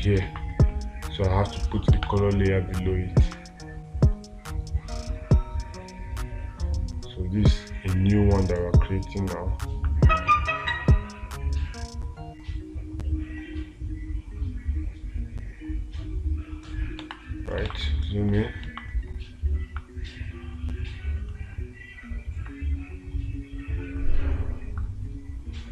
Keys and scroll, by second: 2.4 space, 17.5 space, 18.1 space.